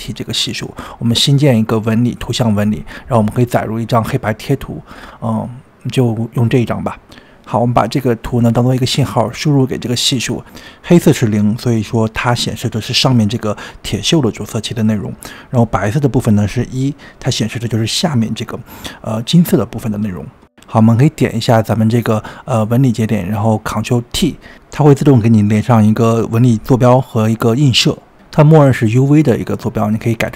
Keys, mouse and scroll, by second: 3.1-3.8 scroll up 5, 3.8-6.0 drag, 8.5 drag, 16.7-19.6 middle drag, 19.9-21.1 middle drag, 21.1-21.6 scroll down 2, 21.6-23.3 middle drag, 23.3 click, 24.0 ctrl+t, 26.1 drag, 29.6-30.3 middle drag.